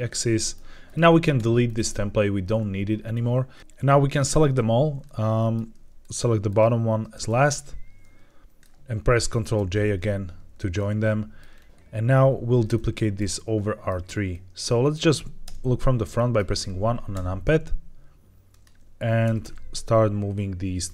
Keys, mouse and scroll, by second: 0.0-0.4 middle drag, 0.7 click, 1.3 x, 3.0 click, 3.6 middle click, 3.6 n, 3.7-4.1 drag, 4.9-5.4 middle drag, 5.9 shift+click, 6.4 shift+click, 7.1-8.5 middle drag, 10.1 ctrl+j, 10.7 middle click, 11.4 scroll down 2, 12.6-13.1 shift+middle drag, 13.3-13.8 middle drag, 14.2-14.9 middle drag, 15.3 KP_1, 16.1 shift+middle drag, 16.5 scroll up 1, 17.0 g, 18.4 click, 19.1 r, 19.3 r, 20.8 click.